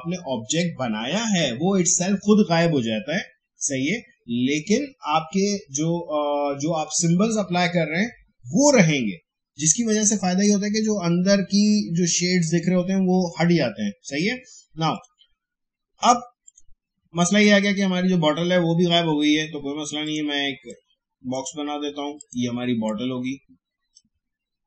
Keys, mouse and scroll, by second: 14.9 click, 20.0-24.6 drag.